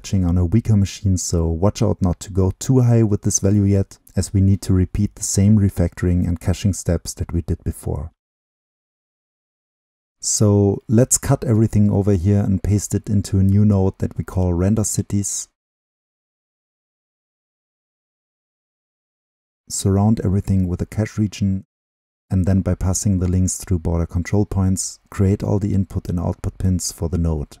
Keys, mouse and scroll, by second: 2.5-4.4 drag, 4.4-5.8 scroll down 2, 5.8-6.7 drag, 6.7-8.8 scroll down 2, 8.8 scroll down 1, 8.9-12.0 drag, 13.2 ctrl+x, 14.3-16.1 drag, 17.1-18.3 drag, 18.3 right click, 18.7-19.6 drag, 19.6 ctrl+v, 20.4-22.1 right drag, 22.3-23.9 drag, 24.2 click, 25.3 ctrl+l, 26.3-27.6 drag.